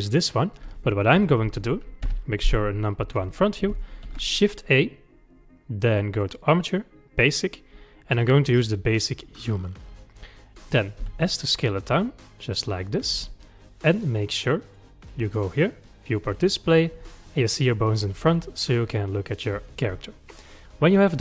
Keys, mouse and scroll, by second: 0.3 click, 1.2 Delete, 2.1 KP_1, 4.1 shift+a, 11.1 s, 14.7 click, 16.3-17.0 drag, 17.0 scroll down 1, 17.7 click.